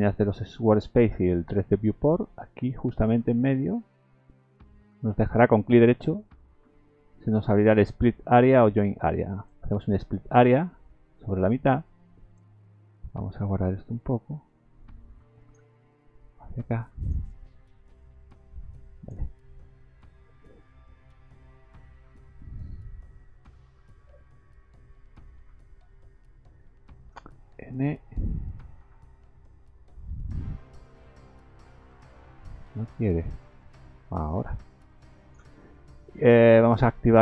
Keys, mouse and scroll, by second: 5.6 right click, 14.8 click, 16.5 click, 18.0 click, 22.9 click, 27.5 n, 33.5 click, 36.6 click.